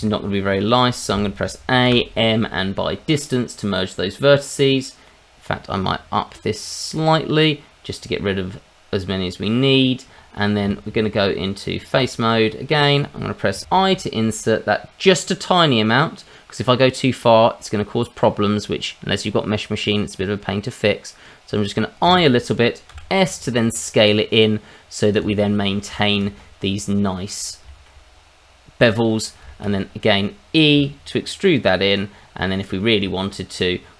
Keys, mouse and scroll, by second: 0.3-1.1 scroll down 2, 1.1 a, 1.8 m, 4.6 middle click, 6.9 click, 8.2-9.5 scroll down 2, 9.5 scroll down 2, 10.1-10.6 scroll up 2, 10.6 Tab, 12.2 click, 12.5 middle click, 13.4 scroll down 1, 13.6 i, 22.1 click, 22.9 s, 25.1 click, 25.4 middle click, 26.0 shift+middle click, 26.3-26.8 scroll up 2, 26.8-27.4 scroll down 1, 27.4 scroll down 2, 27.7 shift+middle click, 29.2 scroll down 1, 29.5 shift+middle click, 29.8 middle click, 30.7 e, 31.9 click, 32.2 scroll up 1, 32.5 middle click, 33.0 Tab.